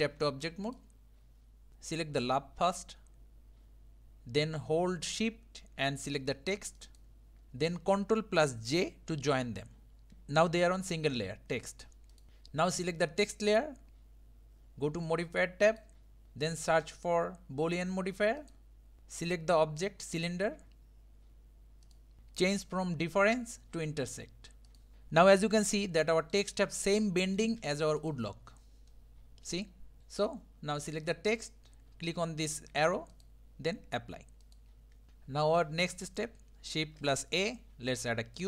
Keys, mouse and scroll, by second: 0.0 Tab, 0.7 click, 1.7-2.8 drag, 6.8 shift+click, 12.1 click, 13.5 click, 15.7 click, 16.9-19.0 drag, 20.1 click, 24.7 click, 24.9-28.0 shift+middle drag, 28.0 click, 28.9-30.4 middle drag, 31.0 click, 33.1-35.1 drag, 35.1-36.7 middle drag, 36.7 shift+a.